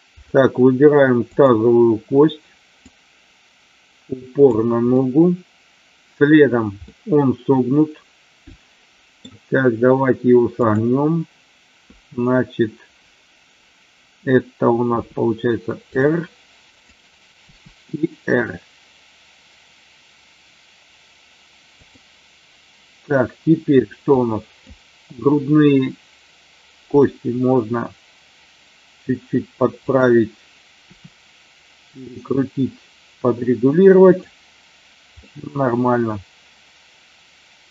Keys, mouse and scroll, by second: 1.2 click, 3.0-4.5 drag, 4.9-6.2 middle drag, 6.7 scroll up 1, 6.9-9.2 middle drag, 10.5 click, 16.6 click, 24.1 click, 29.8 click, 35.3-37.7 middle drag.